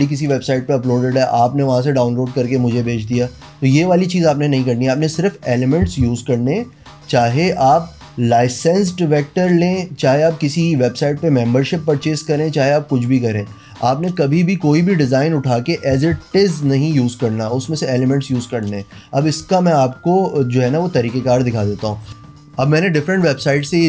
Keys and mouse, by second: 22.1 click, 23.7 space.